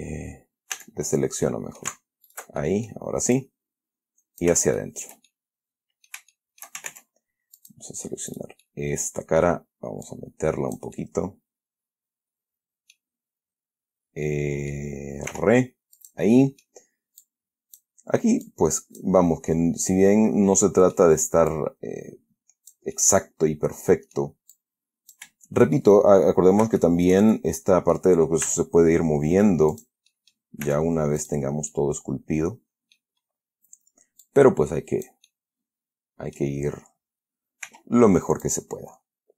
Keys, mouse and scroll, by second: 1.1 a, 1.8 click, 2.6 alt+shift+right click, 2.9 alt+shift+middle click, 3.7-4.9 alt+shift+drag, 5.1-6.6 shift+middle drag, 6.7 shift+middle click, 7.2 ctrl+shift+Tab, 7.9 click, 8.6 right click, 9.0 middle click, 10.4 click, 11.3-13.5 middle drag, 14.6 middle click, 14.7-15.6 scroll down 1, 15.6-16.3 scroll down 1, 15.6 r, 16.3 click, 16.7 middle click, 17.5 click, 18.8 click, 19.5-21.5 middle drag, 21.8-23.2 drag, 23.3-24.7 middle drag, 24.9 click, 26.1 shift+middle click, 27.1 shift+middle click, 27.8 shift+middle click, 28.8 e, 30.0 click, 30.4 middle click, 31.0 s, 31.5 click, 32.0-33.5 middle drag, 33.7-34.1 scroll up 1, 34.6-35.6 drag, 35.6-36.9 middle drag, 38.0 r, 38.8 click.